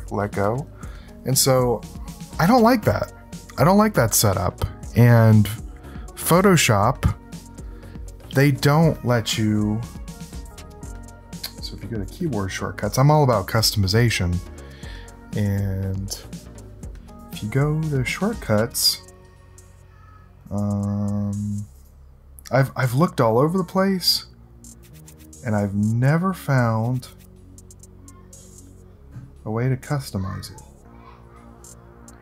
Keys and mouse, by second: 10.1 click, 12.0 click, 16.2 click, 20.4 click, 21.7 click, 23.3-25.5 drag, 27.0-32.2 drag.